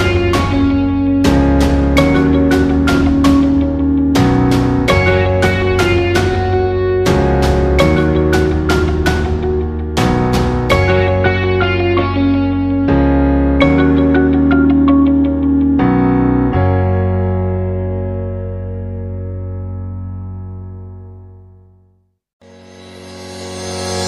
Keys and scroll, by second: 17.9 ctrl+z.